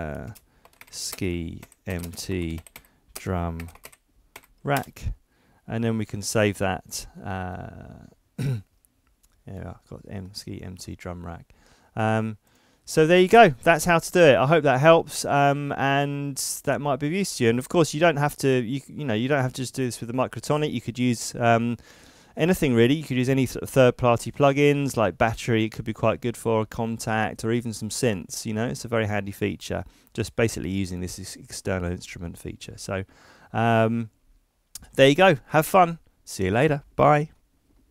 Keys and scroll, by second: 0.6-3.6 typing, 4.7 Return.